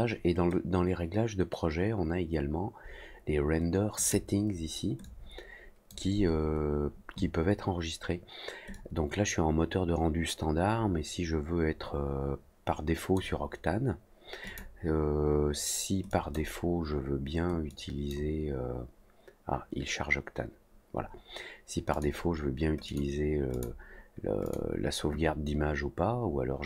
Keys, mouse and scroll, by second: 3.9 click, 5.0 click, 8.7-13.1 drag, 14.4 click, 16.0 click, 17.6 click, 21.9 click, 22.8 click, 23.5 click, 24.4 click.